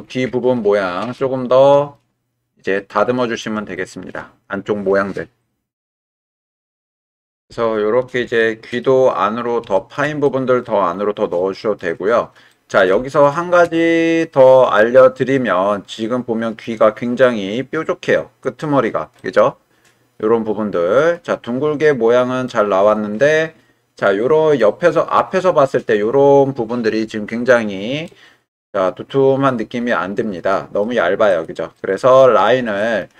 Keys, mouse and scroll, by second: 0.5-1.1 middle drag, 1.4-1.9 shift+drag, 2.7-3.4 middle drag, 3.8-4.1 shift+middle drag, 8.4-8.8 middle drag, 9.7 shift+middle drag, 10.2-10.6 middle drag, 11.4-11.8 middle drag, 12.5-12.9 middle drag, 13.1 shift+middle click, 13.8-14.7 middle drag, 14.7-16.6 drag, 19.2-21.0 middle drag, 22.5-24.6 right drag, 28.0-30.8 middle drag, 31.3 click, 31.8-33.0 middle drag.